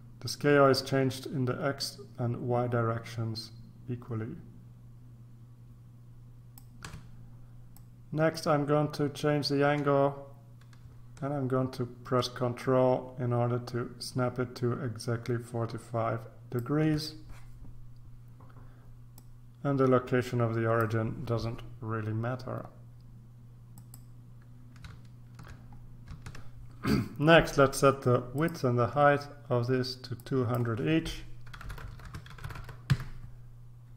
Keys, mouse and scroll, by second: 7.7-17.1 drag, 19.1-21.3 drag, 23.7 click, 26.3 ctrl+r, 28.3 click, 30.2 click, 31.5-32.6 typing, 32.0 Tab, 32.9 Return.